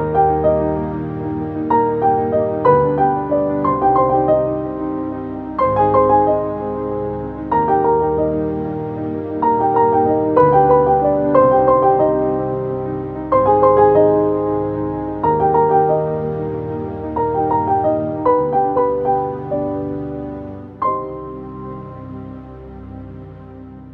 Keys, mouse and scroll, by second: 0.4 click, 3.0 click, 9.9 click, 9.9 click, 10.5-13.8 alt+drag, 14.8 typing, 15.5 Return, 18.0-23.9 drag.